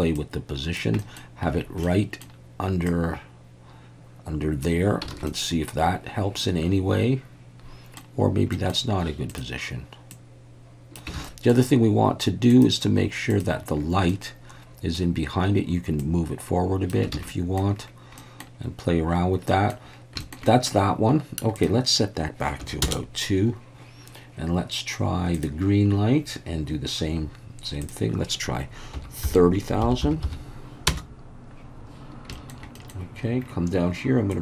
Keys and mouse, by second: 0.3 click, 1.0 middle click, 1.9-2.2 middle drag, 3.0-4.6 drag, 5.2 alt+a, 5.3-8.0 middle drag, 8.5 middle click, 9.3 click, 10.1 click, 11.2 alt+a, 11.2 middle drag, 12.5 click, 13.3 click, 14.1-15.0 middle drag, 16.0 click, 17.2 alt+a, 17.3-17.6 middle drag, 18.2 middle click, 19.5 middle drag, 20.2 shift+middle drag, 20.5 middle click, 21.6-23.6 drag, 27.8-31.5 drag, 30.0 0, 32.3 shift+middle drag, 32.8 middle click, 34.3-34.4 drag.